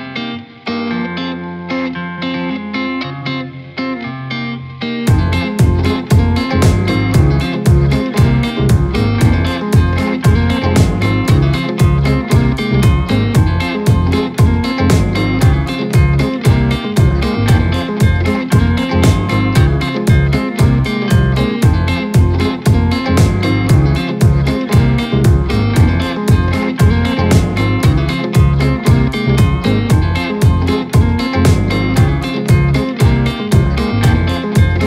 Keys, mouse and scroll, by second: 0.7-2.0 drag, 2.0 KP_0, 3.2-3.7 scroll up 1, 3.7-5.4 shift+middle drag, 5.4 scroll down 1, 5.7-6.1 scroll up 1, 6.1-6.8 shift+middle drag, 6.8-7.1 scroll down 2, 7.1-7.7 scroll up 2, 7.7-8.0 scroll down 1, 8.0 scroll up 1, 9.1 alt+z, 9.5 scroll down 1, 9.9 scroll up 1, 10.8 ctrl+z, 11.2 scroll down 1, 11.5-12.0 scroll up 2, 12.3-13.1 shift+middle drag, 13.1 scroll down 1, 13.5-15.1 shift+middle drag, 15.1 ctrl+b, 17.8 ctrl+b, 23.2 scroll down 2, 23.4-23.9 middle drag, 23.9 scroll down 1, 24.1 middle click, 24.6-25.7 scroll down 1, 25.7 Tab, 25.9 click, 26.2-27.1 scroll up 2, 27.1 ctrl+z, 27.3 ctrl+z, 27.5 ctrl+z, 27.8 ctrl+z, 28.0 ctrl+z, 28.3 ctrl+z, 28.6 ctrl+z, 29.0 scroll down 2, 29.2 middle click, 30.0-31.4 drag, 31.4 scroll up 3, 31.8-32.5 shift+middle drag, 32.5-32.9 scroll down 1.